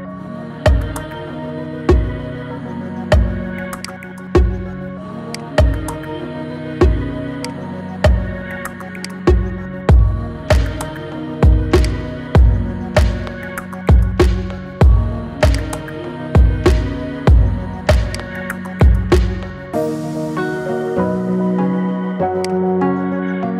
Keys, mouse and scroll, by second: 1.0 scroll down 1, 3.6 click, 5.1 click, 7.3-11.7 drag, 12.3-13.4 scroll down 4, 13.9 middle click, 15.3 click, 20.5 scroll up 1, 21.4 scroll down 1, 22.2 click.